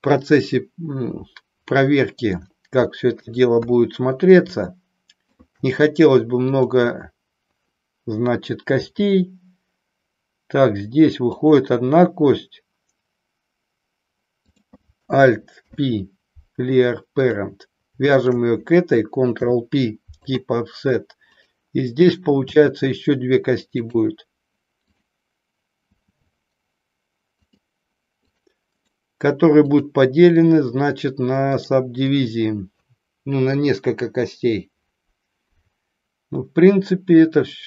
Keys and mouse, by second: 2.4-3.5 shift+middle drag, 3.7 KP_1, 4.6 shift+middle click, 11.4 click, 14.6 click, 15.5 alt+p, 18.1 shift+click, 19.4 ctrl+p, 21.4 click, 22.6 e, 24.0 click, 24.9 click, 27.4 click, 28.9 right click, 31.5 right click.